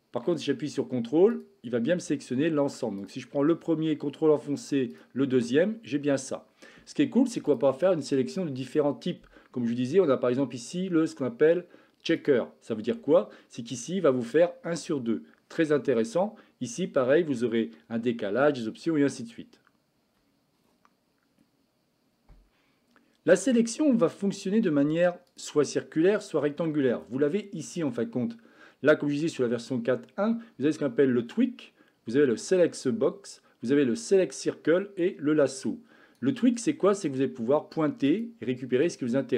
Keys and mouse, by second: 2.9 click, 4.9 ctrl+click, 7.4-12.2 drag, 27.6-36.0 drag, 36.9 click, 38.1 click, 38.7 click.